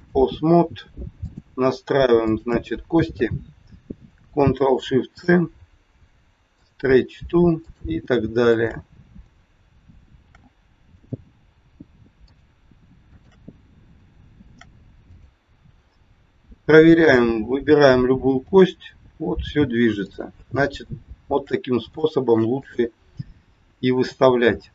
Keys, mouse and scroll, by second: 1.1 click, 2.3 shift+click, 2.4 shift+click, 5.0 ctrl+shift+c, 7.6 click, 8.4 shift+click, 10.1 ctrl+shift+c, 12.1 click, 13.0 shift+click, 14.4 ctrl+shift+c, 15.6-16.0 scroll down 2, 17.0 click, 18.5 g, 20.8 scroll down 1, 20.9 shift+middle click, 21.9 shift+middle click, 22.5 middle click, 22.5 scroll up 1.